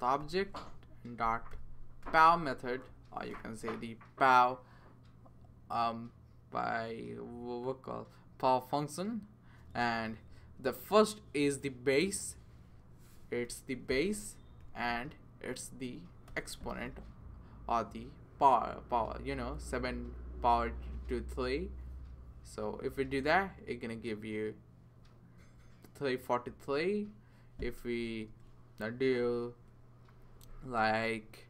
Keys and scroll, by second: 0.0-3.8 typing, 13.4-15.1 typing, 16.3 3, 28.3 BackSpace, 30.1 Right, 30.5 BackSpace, 30.8 BackSpace.